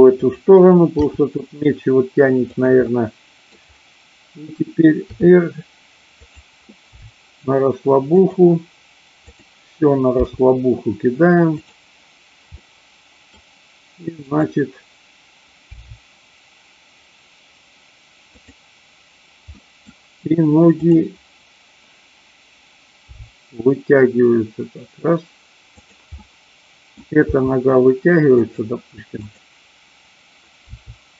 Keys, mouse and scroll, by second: 0.2 click, 1.2 g, 2.5 click, 2.8-3.5 middle drag, 5.1 r, 6.2 click, 6.9 g, 8.1 click, 9.3 click, 11.7 click, 12.5 middle click, 14.3-15.3 drag, 15.7 r, 18.3 click, 19.5 middle click, 20.7-21.7 drag, 23.1 g, 25.7 click, 26.2 middle click, 27.3 g, 28.5 click, 30.7 r.